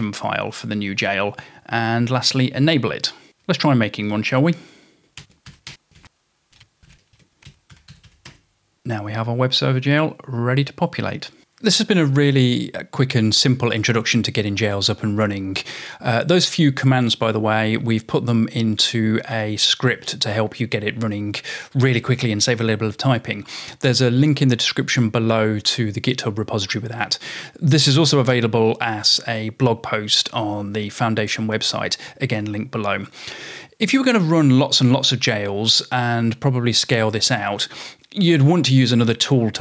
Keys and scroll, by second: 4.0 typing, 5.2-8.6 typing.